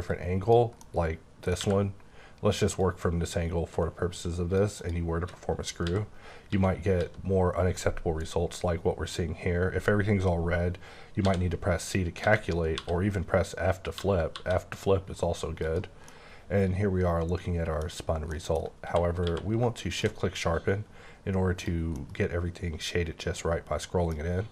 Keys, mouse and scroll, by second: 0.0 click, 0.7 middle click, 1.6 q, 2.8 click, 4.7 click, 5.7-6.5 typing, 8.8 typing, 11.2-14.5 typing, 15.6 click, 16.0 middle click, 17.9-18.2 scroll up 1, 18.2 middle click, 19.2 q, 19.8 shift+click, 20.9-21.6 scroll down 3, 21.6 click, 21.9 middle click.